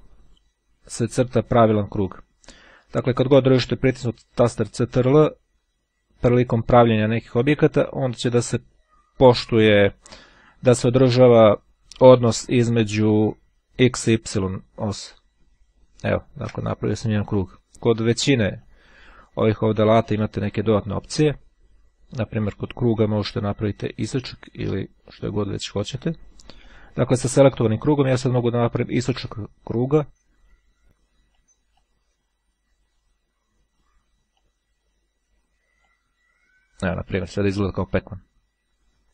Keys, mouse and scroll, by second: 17.7 click, 18.6 click, 22.5 click, 25.9-27.3 drag, 28.8-32.1 drag, 34.1-35.3 drag, 35.9-37.0 drag.